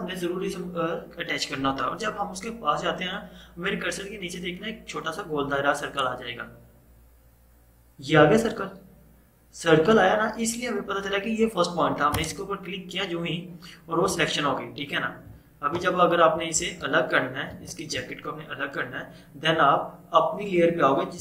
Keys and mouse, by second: 12.2 click, 13.7 -, 16.1 typing, 17.6 ctrl+0.